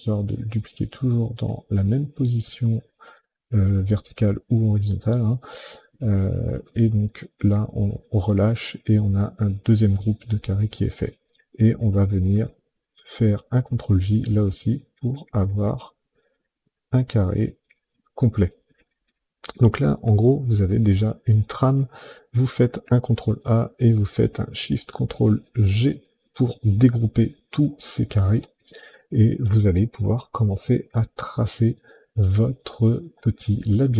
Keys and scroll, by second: 12.9 ctrl+j, 22.6 ctrl+a, 25.5 ctrl+shift+g.